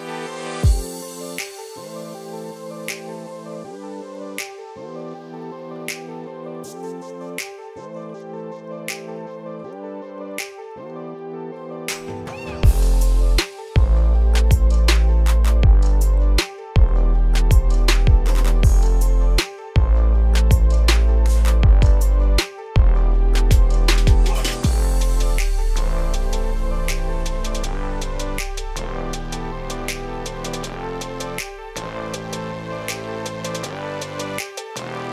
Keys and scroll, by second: 29.8 ctrl+space.